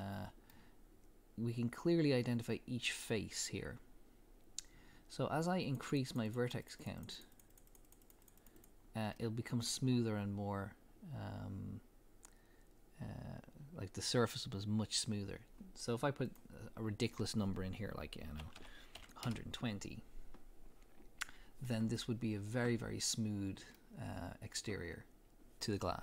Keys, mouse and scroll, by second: 5.6-8.8 drag, 9.1-13.1 middle drag, 16.2-21.7 drag, 19.3 Return, 21.7-24.5 middle drag.